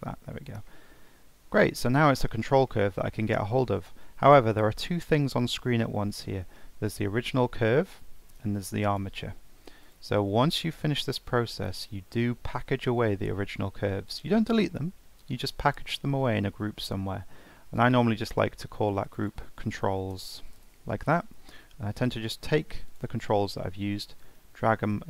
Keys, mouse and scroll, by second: 0.0 Tab, 0.7-2.0 middle drag, 2.0 scroll down 1, 2.2-5.8 middle drag, 6.9 click, 8.9 click, 9.8 click, 11.1 click, 17.8-19.2 drag, 19.3-22.1 drag, 22.9 click, 24.2 click.